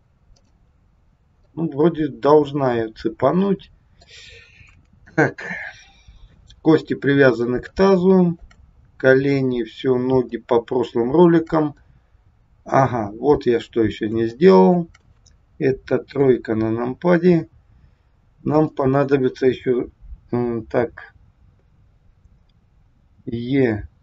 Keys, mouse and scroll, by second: 0.3 click, 1.4 middle click, 4.7 KP_1, 5.2-6.7 scroll up 2, 7.7 shift+middle click, 8.8 scroll down 3, 10.3 shift+middle click, 11.9 middle click, 14.4 shift+middle click, 16.1 KP_3, 18.6 click, 23.2 e.